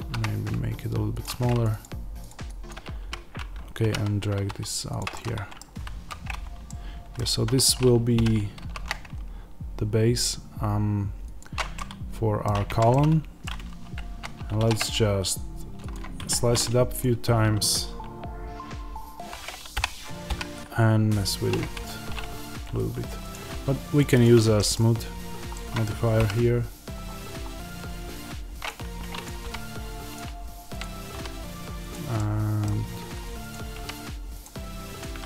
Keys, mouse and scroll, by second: 1.6-3.7 drag, 3.7 g, 4.9 click, 5.0-11.3 middle drag, 5.5 scroll, 5.8 z, 7.2 Tab, 8.1 g, 11.3 click, 11.7-24.0 middle drag, 12.6 Tab, 14.1 z, 14.5 ctrl+r, 16.2 Escape, 16.9 click, 19.6 o, 21.8 Escape, 24.0 click, 24.5-28.6 middle drag, 25.1 scroll up 1, 26.1 g, 28.6 click, 29.3 g, 30.1 click, 31.0 g, 31.8 click, 32.1-33.4 middle drag, 33.4 click, 33.7 g, 34.3 click, 35.0 g.